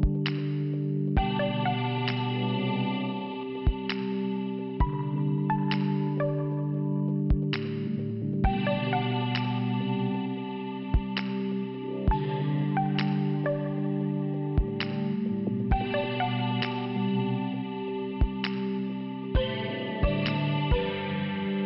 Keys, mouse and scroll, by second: 0.6 click, 2.1 click, 2.2 click, 3.0 click, 4.6 click, 5.3 click, 6.3 click, 6.4 click, 7.3 click, 11.5-11.9 scroll down 3, 12.5 click, 14.3 5, 16.0 click, 17.5 click, 19.8 shift+Return, 20.9 middle click.